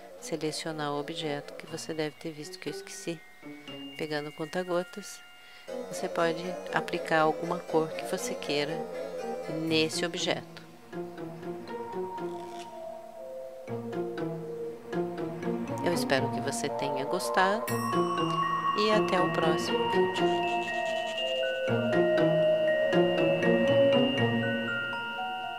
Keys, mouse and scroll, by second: 0.0-1.7 drag, 2.2-4.1 drag, 9.3-10.6 drag, 10.6 middle click.